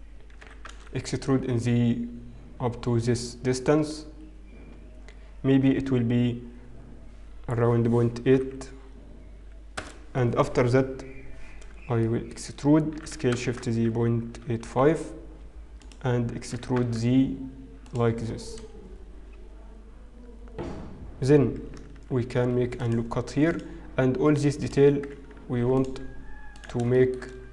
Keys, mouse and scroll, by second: 0.8 e, 12.1 shift+middle click, 14.0 e, 22.3 ctrl+r, 24.7 click, 26.1 ctrl+r.